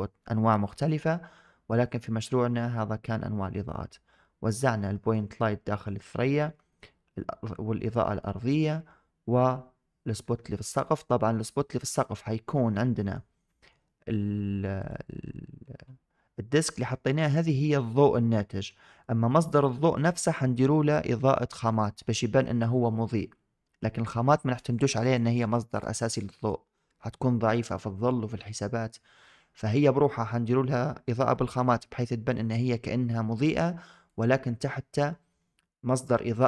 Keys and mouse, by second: 1.7 shift+drag, 2.3-4.3 drag, 4.8 shift+drag, 6.0 shift+drag, 8.1 shift+middle drag, 10.3-10.8 shift+middle drag, 11.7 shift+middle click, 12.4 middle click, 13.4 shift+click, 19.3 click.